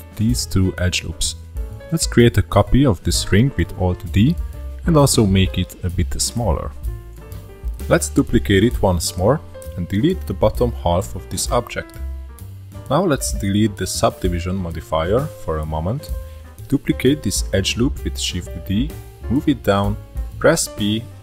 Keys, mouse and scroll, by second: 0.0 scroll up 2, 0.2 shift+d, 3.2-3.6 scroll up 2, 3.6 s, 6.6 click, 7.7 shift+d, 11.2 middle click, 11.7 click, 12.9 x, 14.2-15.6 scroll down 3, 15.6 click, 16.5 shift+middle click, 16.6 alt+click, 17.6 shift+d, 18.9 scroll up 1, 19.0-20.2 shift+middle drag, 20.2 p.